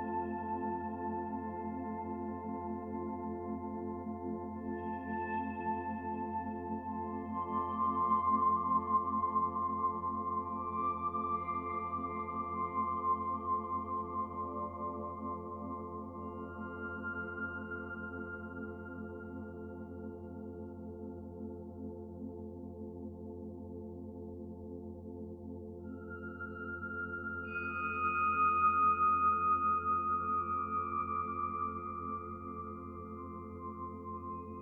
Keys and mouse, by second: 3.2 middle click, 3.9 click, 6.3 middle click, 7.2 click, 7.5 click, 11.3-12.5 middle drag, 11.3 g, 12.7-14.3 middle drag, 14.5 middle click, 15.3 ctrl+s, 15.7 click, 17.8 h, 18.2 ctrl+s, 22.2 click, 22.7-23.2 middle drag, 23.3-23.8 middle drag, 24.3 middle drag, 24.7 shift+middle drag, 26.0 click, 27.0 h, 27.4 drag, 27.7-28.1 middle drag, 28.9 s, 30.7 middle click, 31.3 middle click, 31.7 middle click, 32.3 g, 33.6-34.6 middle drag.